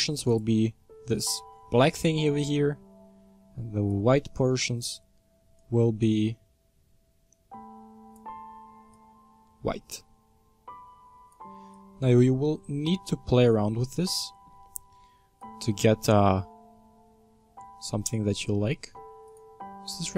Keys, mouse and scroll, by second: 3.9-13.0 drag, 13.0-14.2 scroll up 8, 14.2-15.4 shift+middle drag, 15.4-19.4 drag.